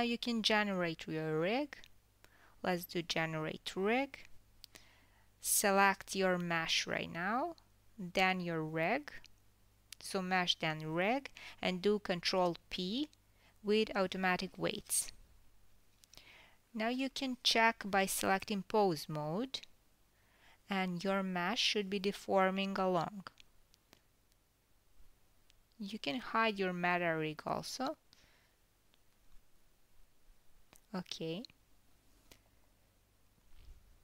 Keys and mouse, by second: 2.2-8.5 drag, 8.5-10.3 middle drag, 10.3 h, 10.9 click, 11.9 shift+click, 13.9 ctrl+p, 17.9-19.2 middle drag, 19.2-22.8 drag, 23.4 r, 30.4-32.1 middle drag, 32.1 click, 32.4-34.0 middle drag.